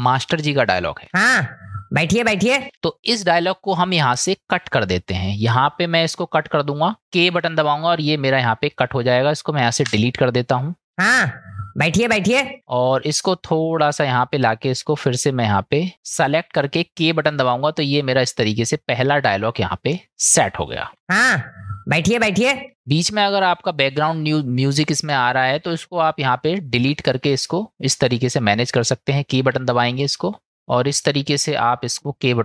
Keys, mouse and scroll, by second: 1.0 space, 2.6 space, 3.0 click, 4.1-5.6 drag, 7.9 k, 8.8 click, 9.8 Delete, 10.9 space, 12.6 space, 13.1 click, 15.0 click, 17.0 k, 18.1 click, 19.9 click, 20.9 space, 22.7 space, 27.1 click, 29.4 k, 30.5 k, 30.6-31.9 drag.